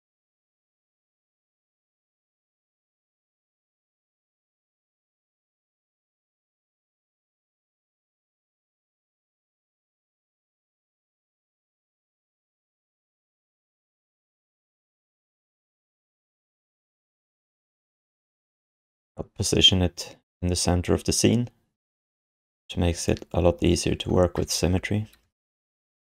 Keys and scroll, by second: 4.2 r, 5.6 w, 6.2 e, 7.6 j, 9.1 d, 10.0 w, 10.3 f, 11.8 space, 12.2 space, 13.1 f, 24.4 space, 25.2 space.